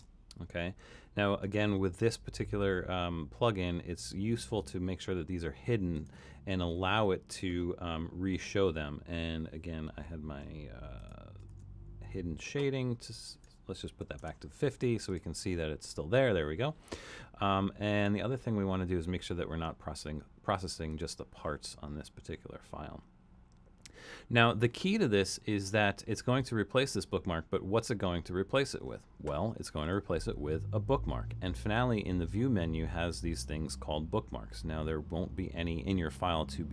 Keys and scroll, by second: 0.0-0.4 typing, 11.5 super+,, 13.8-14.7 typing.